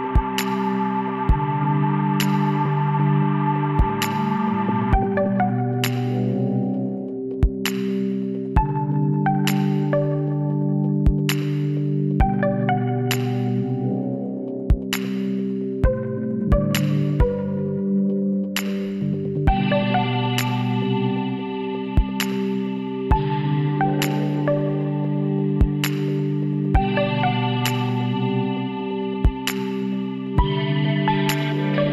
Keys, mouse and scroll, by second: 1.4 KP_3, 1.9 middle click, 3.6-5.4 drag, 6.9-8.9 middle drag, 9.3 KP_1, 11.4 z, 13.1-15.1 drag, 14.4-16.0 right drag, 15.8 b, 17.3 b, 20.2-21.9 drag, 24.2-26.7 middle drag, 24.2-24.8 scroll up 1, 24.8 scroll down 1, 26.8-30.4 middle drag, 30.4 Tab, 31.3 z, 31.7-31.9 middle drag.